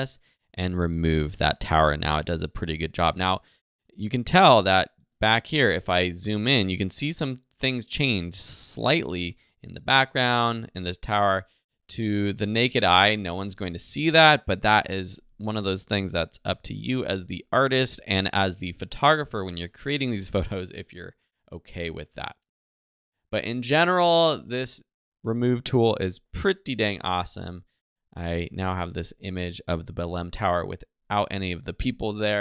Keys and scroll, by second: 2.8 z, 5.0 space, 12.0 z, 13.5 alt+space, 14.4 space, 16.0 super+0.